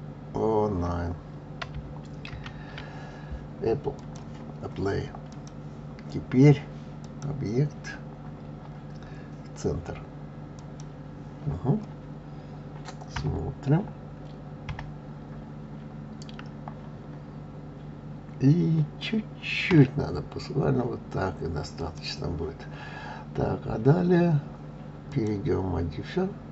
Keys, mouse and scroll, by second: 4.0 click, 5.3 click, 7.0-10.1 drag, 13.1 KP_3, 25.1-26.5 drag.